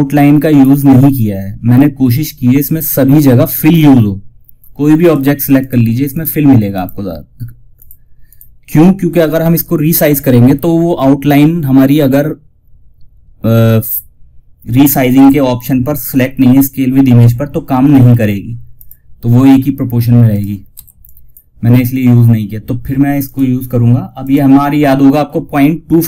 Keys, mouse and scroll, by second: 1.7 scroll up 1, 4.3 click, 14.5 F12, 18.0 click, 19.0 scroll down 1, 19.6 click, 20.0 F2, 20.3 click.